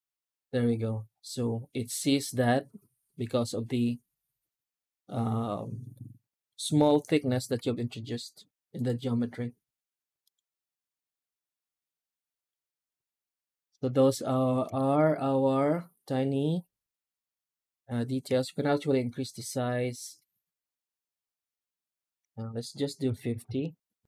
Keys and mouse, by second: 7.4 F9, 8.6-12.7 drag, 14.6 shift+middle drag, 18.1 F9.